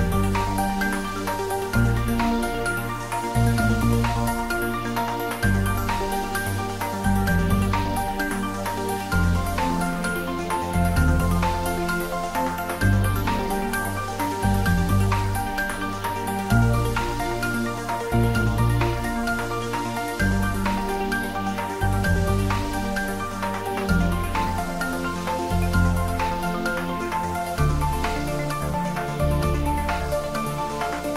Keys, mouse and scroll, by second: 9.5-10.9 scroll up 1, 11.5-12.7 click, 13.1-15.1 scroll up 1, 15.9 click, 17.1 s, 18.9 click, 21.5 shift+z, 23.0 click, 23.9 click, 24.9 g, 25.3 z, 26.0 Down, 27.3 space, 28.1-28.5 scroll up 1, 28.9-30.2 middle drag, 30.5 shift+z.